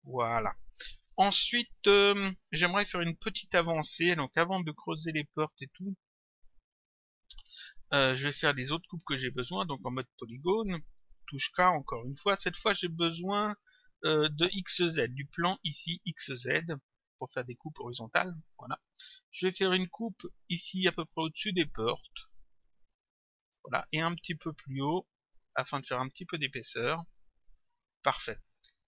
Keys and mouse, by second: 9.9 click, 11.5 k, 15.7 click, 17.6 click, 23.4 click, 27.5 click.